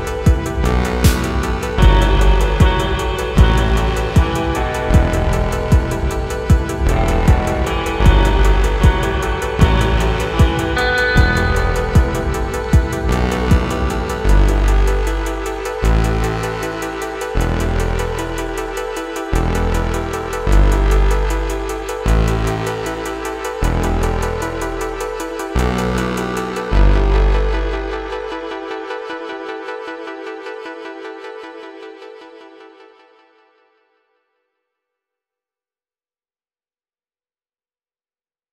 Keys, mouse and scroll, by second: 0.0-11.0 typing, 0.1 scroll down 3, 0.1 shift+middle click, 0.9 click, 1.1 scroll down 7, 1.1 shift+middle click, 1.3 click, 1.3 middle click, 1.8 scroll down 1, 3.1 shift+middle click, 3.1 scroll up 2, 4.1 alt+m, 4.4 click, 5.4 shift+middle click, 5.4 scroll up 1, 5.8 middle click, 6.4 middle click, 7.1 scroll up 4, 7.2 shift+middle click, 9.8 click, 10.1 Tab, 10.1 middle click, 10.9 scroll up 2, 10.9 shift+middle click, 12.0-15.2 typing, 12.2 shift+middle click, 12.3-13.4 scroll up 4, 12.9 shift+middle click, 13.4 shift+middle click, 13.8 middle click, 14.1 scroll up 1, 14.3 shift+click, 15.5 shift+middle click, 15.8 scroll down 2, 15.9 shift+middle click, 16.6 KP_1, 17.0 shift+middle click, 17.1 scroll up 2, 17.2 2, 17.4 shift+click, 17.7 middle click, 17.8 3, 17.9 click, 18.0 middle click, 18.2 shift+click, 18.3 shift+middle click, 18.6 shift+click, 18.6 middle click, 18.9 scroll down 1, 18.9 shift+middle click, 19.2 alt+click, 19.3 middle click, 19.6 e, 19.7 g, 20.0 g, 20.0 shift+middle click, 20.3 KP_1, 20.7 shift+click, 21.0 shift+click, 21.3 shift+click, 21.5 shift+click, 21.7 click, 22.0 s, 22.3 middle click, 22.5 g, 22.8 middle click, 23.4 KP_3, 23.6-23.9 scroll up 4, 23.6 shift+middle click, 23.9 shift+middle click, 24.2 scroll up 1, 24.3 middle click, 24.4 Tab, 24.5 click, 25.6 click, 26.0 ctrl+z, 26.2 alt+click, 26.2 middle click, 26.5-30.1 typing, 26.6 shift+middle click, 27.0 shift+middle click, 27.1 scroll up 3, 27.6 scroll down 2, 27.6 shift+middle click, 27.8 shift+middle click, 27.8 alt+click, 28.0 shift+middle click, 28.4 middle click, 29.0 shift+middle click, 29.6 scroll down 2, 29.6 middle click, 30.0 ctrl+z, 30.0 middle click, 30.3 middle click, 30.9 scroll up 2, 31.0 middle click, 31.1 scroll down 2, 31.2 shift+middle click, 31.5-34.3 typing, 31.6 middle click, 31.9 ctrl+z, 32.2 middle click, 32.2 shift+click, 32.5 middle click, 32.8 scroll up 1, 32.9 click, 33.0 scroll down 2, 33.0 middle click, 33.2 middle click, 33.3 scroll up 3, 33.4 middle click, 33.9 click, 34.1 middle click, 34.3 alt+click, 34.4 middle click, 34.7 alt+shift+click, 34.8 middle click, 35.0-35.5 scroll up 1, 35.5 click, 35.8 middle click, 35.8 s, 36.0 middle click, 36.6 1, 36.7 click, 36.7 shift+middle click, 36.8 scroll up 3, 36.8 g, 37.6 middle click, 37.8-38.2 scroll down 4, 38.2 middle click, 38.3-38.5 typing.